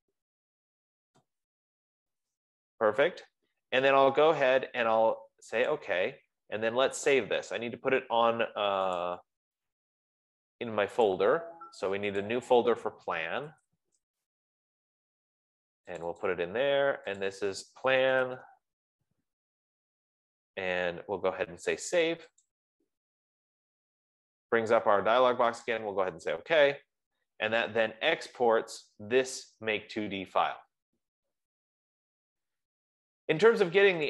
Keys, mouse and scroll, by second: 0.1 click, 0.6 F15, 0.9-1.5 typing, 6.4 click, 9.5 click, 11.7 click, 12.7 click, 13.3-14.6 typing, 16.3 click, 16.5 click, 17.6 click, 18.3-19.3 typing, 23.0 click, 26.2 click.